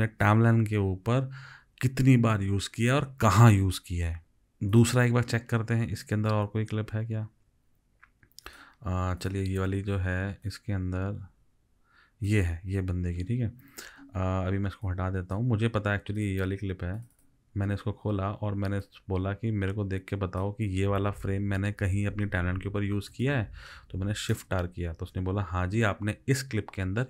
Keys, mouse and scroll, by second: 17.2 double click, 24.4 shift+r.